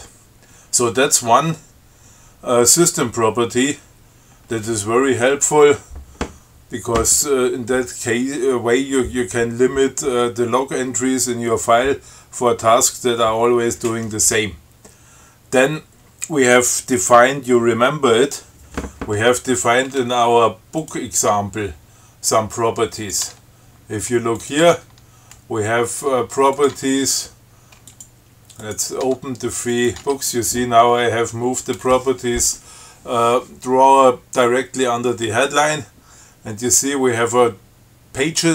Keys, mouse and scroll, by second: 21.1 click, 21.6 Tab, 23.2 click, 23.5 Tab, 24.6 click, 24.9 Tab, 26.8 click, 27.0 Tab, 28.2 click, 28.9 click, 29.3 Tab, 29.9 click, 30.2 Tab.